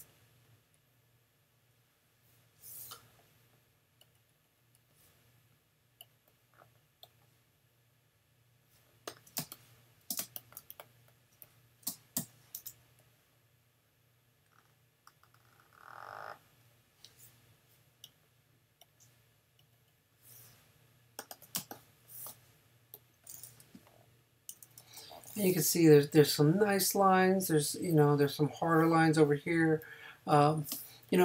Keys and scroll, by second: 9.4 super+space, 12.2 n, 21.6 super+space, 22.5 space, 24.5 super+-, 30.7 space.